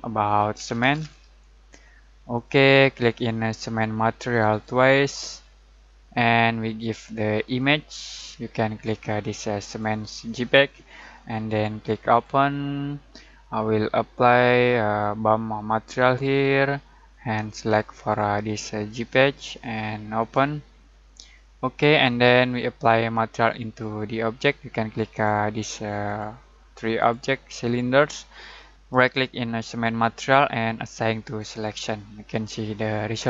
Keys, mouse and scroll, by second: 0.1-1.5 typing, 0.3 click, 2.3 click, 7.4 click, 12.0 click, 14.4-15.0 drag, 25.1 click, 28.9 right click, 31.3 click.